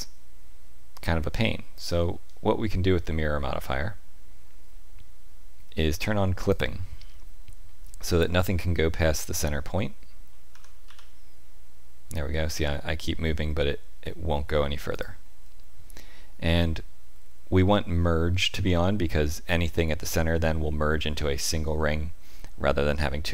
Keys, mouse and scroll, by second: 6.5 click, 10.5 g, 23.0 shift+middle click.